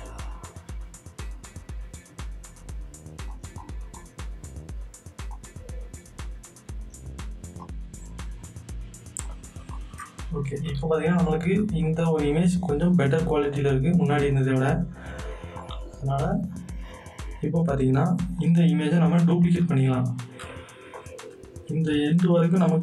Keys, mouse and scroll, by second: 3.3 click, 3.5 right click, 3.9 click, 3.9-9.2 drag, 11.4 z, 11.8-14.0 drag, 14.0 right click, 14.5 click, 16.5 scroll down 1, 17.4 scroll down 1, 18.4 click, 18.9 click, 19.7-20.1 alt+scroll down 3, 20.9 click, 20.9 click, 22.0 scroll down 2.